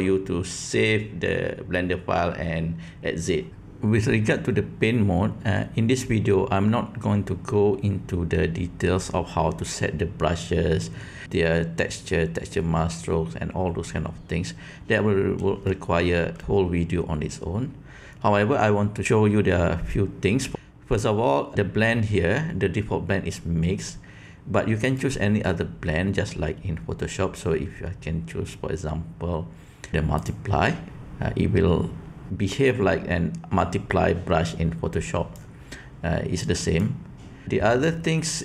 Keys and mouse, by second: 15.7 shift+middle click, 24.8-30.3 drag, 30.9-35.3 drag, 36.4 click.